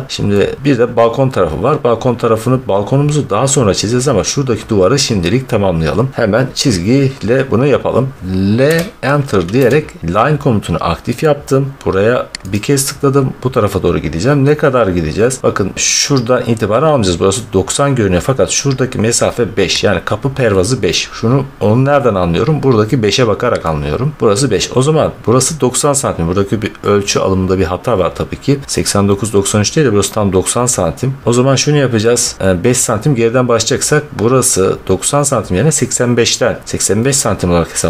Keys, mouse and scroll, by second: 6.9-8.1 middle drag, 6.9 scroll, 7.1 scroll, 7.2 scroll, 7.5 scroll, 7.6 scroll, 7.8 scroll, 7.9 scroll, 8.5 l, 9.5 Return, 9.5-10.2 scroll, 10.2-11.7 scroll, 12.4 click, 15.4-16.5 drag, 18.3 scroll, 19.8 scroll, 20.7 click, 24.2 click, 30.6-31.5 middle drag, 31.5 scroll, 37.7-37.8 middle drag.